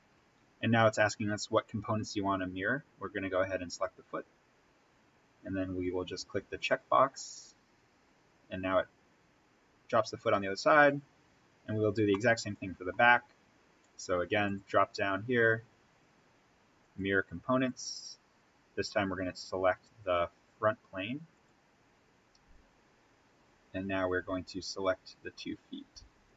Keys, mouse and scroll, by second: 1.9-2.2 scroll down 1, 3.6 click, 4.6-6.4 scroll up 1, 10.1-11.9 scroll up 1, 12.1-14.4 middle drag, 14.4 click, 19.5-21.2 scroll up 1, 21.2 click, 24.7 click.